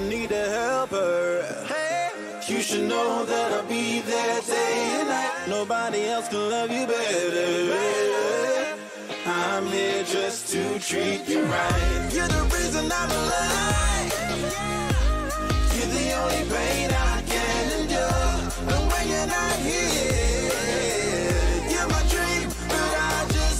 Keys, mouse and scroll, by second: 13.7-16.1 middle drag, 21.1 ctrl+z, 21.1-22.3 middle drag, 22.3 a.